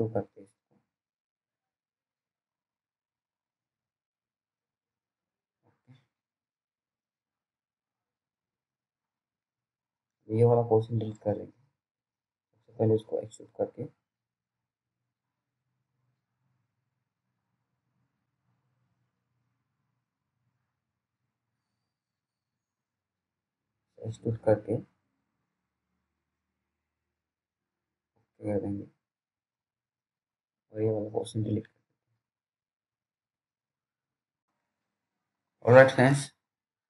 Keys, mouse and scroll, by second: 0.5 BackSpace, 3.2-4.1 scroll down 1, 4.2 middle click, 7.2 F3, 8.8 F4, 10.4 scroll down 1, 11.1 t, 11.6-12.0 scroll down 1, 12.9 alt+middle click, 14.4 right click, 15.0 click, 16.2-17.4 scroll up 1, 17.4 click, 17.9-18.8 scroll up 1, 18.8 click, 21.6 click, 32.1 Delete, 33.0-33.9 scroll down 1, 34.0 alt+middle click.